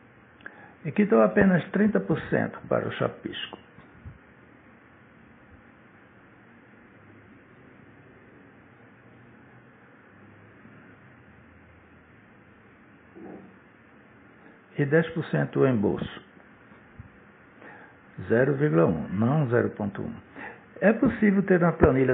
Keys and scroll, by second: 0.2 0, 1.3-2.3 typing, 2.3 Return, 12.7 0, 13.8 1, 17.8-19.2 typing.